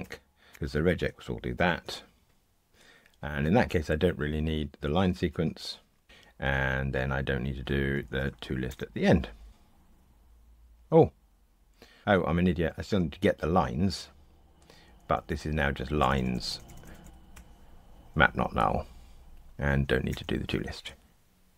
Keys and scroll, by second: 0.0 super+BackSpace, 1.5 ctrl+r, 6.0 super+BackSpace, 8.7 super+BackSpace, 9.5 ctrl+r, 12.0 shift+super+z, 17.3 Escape, 19.5 super+z, 21.1 ctrl+r.